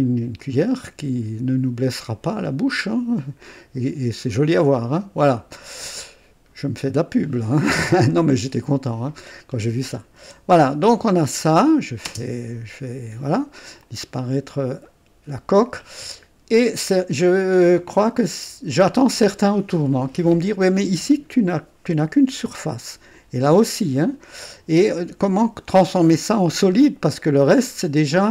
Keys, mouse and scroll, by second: 0.4-4.4 drag, 4.5-4.8 scroll down 1, 5.5 click, 6.8 right click, 7.8 click, 9.0 scroll up 1, 9.3-9.6 scroll down 1, 10.3 &, 11.6 click, 12.1 space, 13.8 click, 14.9 right click, 15.8-17.4 drag, 17.8 click, 19.4 scroll up 1, 22.4 click, 23.9 click.